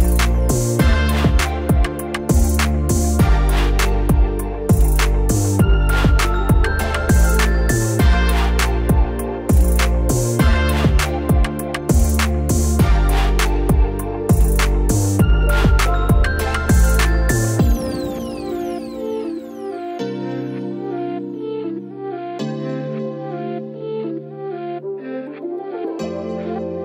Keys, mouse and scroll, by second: 2.7 click, 6.2-7.7 typing, 6.4 Tab, 9.4 click, 12.7 typing, 15.0-21.0 drag, 21.4 click, 21.9-23.3 typing, 24.7 click, 24.7 typing, 25.2 ctrl+c, 25.6 ctrl+click, 25.9 ctrl+v, 26.2 click, 26.7 ctrl+v.